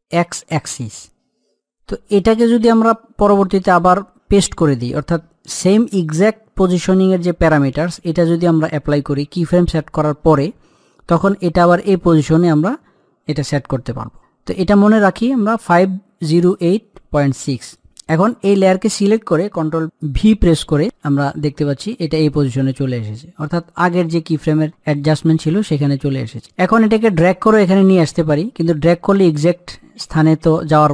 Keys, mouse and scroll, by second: 17.9 click, 20.3 ctrl+v, 22.9-25.9 middle drag, 25.9-30.9 middle drag.